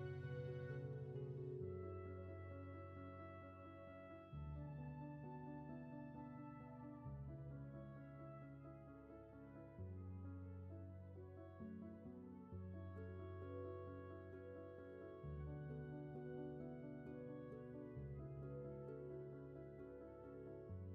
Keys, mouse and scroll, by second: 16.4 space, 18.1 ctrl+z, 18.5 space, 20.7 ctrl+z.